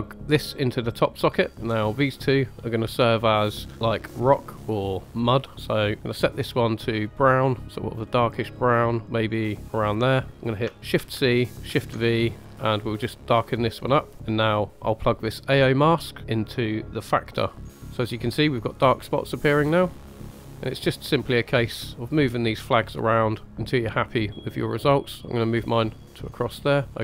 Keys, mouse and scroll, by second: 0.0-1.3 drag, 1.7 scroll up 2, 2.0 middle click, 3.7 click, 5.7 click, 10.9 ctrl+c, 11.6 ctrl+v, 12.3 click, 14.1 middle click, 14.1 scroll down 2, 16.0 middle click, 16.5 drag, 16.8-17.6 drag, 17.9 scroll up 1, 18.3-18.7 middle drag, 18.9 middle click, 20.1 click, 20.5 middle click, 21.0-21.9 scroll up 4, 22.1 click, 23.4-25.5 drag, 26.0-26.8 middle drag, 26.8 scroll down 2.